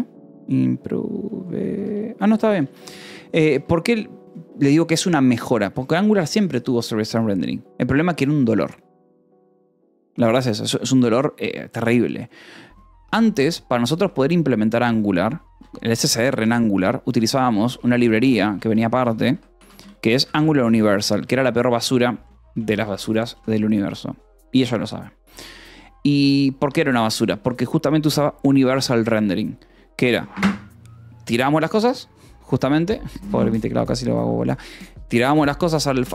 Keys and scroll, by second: 0.0-4.0 typing, 7.6 j, 15.1-15.9 typing, 17.0-21.2 typing, 22.6 a, 22.7 BackSpace, 22.9 Escape, 23.9 ctrl+s, 25.9 v, 26.5 Escape, 27.2 v, 27.8 e, 28.7 Escape, 34.2 F10.